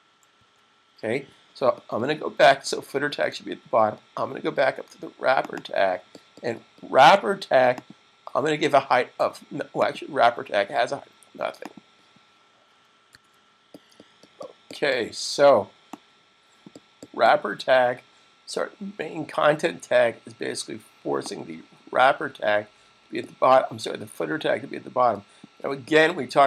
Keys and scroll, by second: 12.3 super+s.